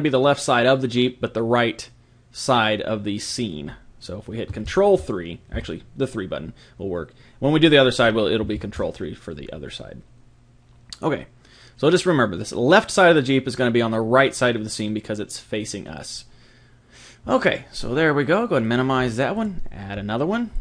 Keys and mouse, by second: 5.5 KP_3, 18.6 click.